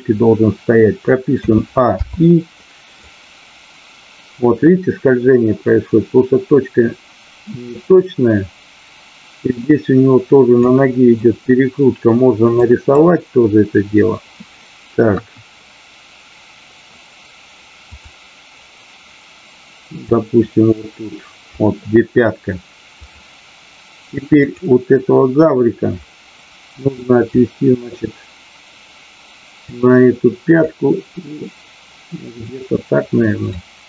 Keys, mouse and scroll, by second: 3.0-10.7 drag, 12.5 click, 15.1 KP_1, 20.1-21.5 drag, 23.0 click, 24.5 click, 27.4-29.6 drag, 30.6-32.3 drag, 33.6-33.8 drag.